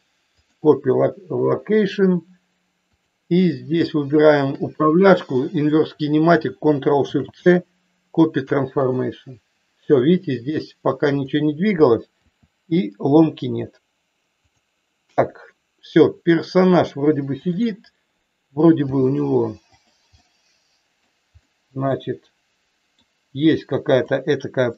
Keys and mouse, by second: 3.0 click, 4.4 shift+click, 11.1 click, 12.3 r, 17.5 click, 18.8 g, 20.1 middle click, 21.3 middle click, 22.0-23.0 middle drag, 23.9 click, 24.6 middle click.